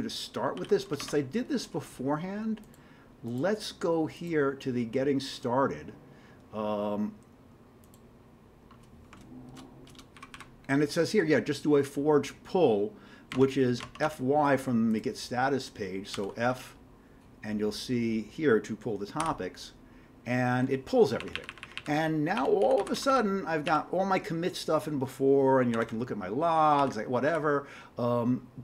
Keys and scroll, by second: 0.6 ctrl+g, 1.0 alt+Tab, 10.2 ctrl+=, 10.3 ctrl+=, 13.4 alt+Tab, 13.8 alt+Tab, 16.1 f, 19.2 y, 21.5 Up, 21.6 Up, 22.6 Down, 22.8 Down, 23.0 Down, 23.1 Down, 23.7 Up, 25.7-26.8 typing, 27.3 Down.